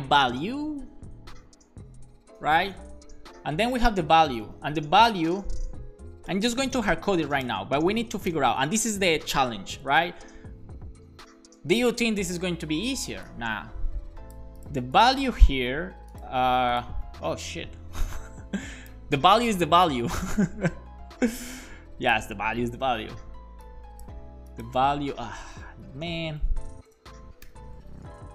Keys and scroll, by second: 4.3-5.4 typing, 6.5-8.3 typing, 22.7 super+c, 25.4 Down, 25.7 super+Right, 26.1 Left, 26.2 Left, 26.4 Left, 26.8 BackSpace, 27.5 shift+[, 27.8 super+v, 28.0 super+s.